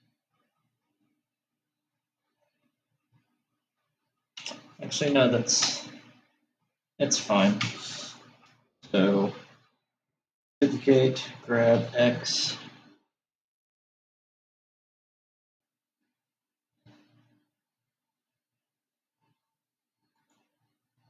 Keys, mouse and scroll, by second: 0.2-3.4 middle drag, 8.1 Tab, 10.9 shift+d.